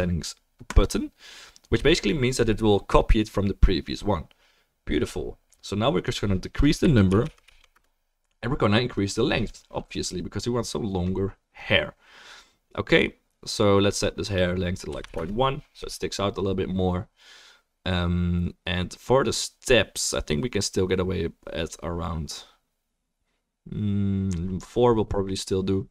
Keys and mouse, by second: 0.7-25.9 drag, 0.7-25.9 middle drag, 7.4 0.